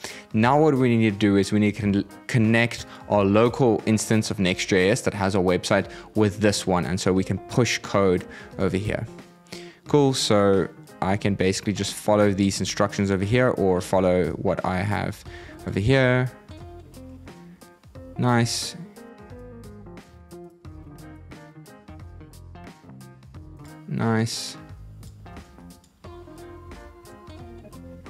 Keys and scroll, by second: 15.0 super+c, 15.7 super+v, 19.9 super+c, 20.5 super+v, 25.0 super+c, 26.4 super+v.